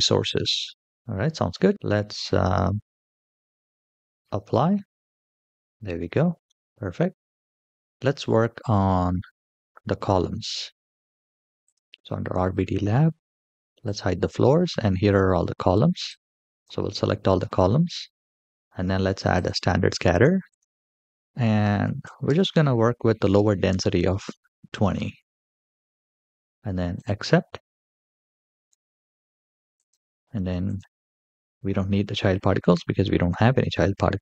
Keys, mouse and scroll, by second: 0.7 middle click, 0.9 scroll down 1, 1.6 scroll down 7, 1.7-3.3 middle drag, 5.1 click, 5.3-5.8 middle drag, 6.2-6.6 middle drag, 6.6 scroll down 3, 10.2 middle click, 11.4 click, 13.6 click, 14.5-14.8 shift+middle drag, 15.0-15.8 scroll down 2, 15.8-16.5 drag, 19.1 click, 20.2-22.1 drag, 23.3-23.8 scroll up 2, 23.8-24.6 middle drag, 25.3-26.5 scroll down 1, 26.5 scroll down 1, 26.7 click, 29.5 click, 30.4 click.